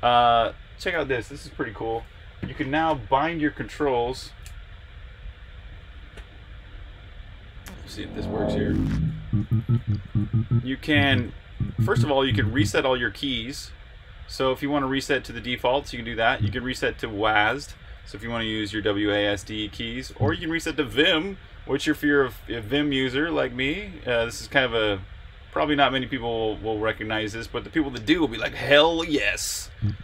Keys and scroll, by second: 0.9 super+r, 1.2 F7, 9.1 Escape, 9.7 j, 9.9 f, 10.8 j, 16.2 j, 20.0 j, 29.4-30.0 typing.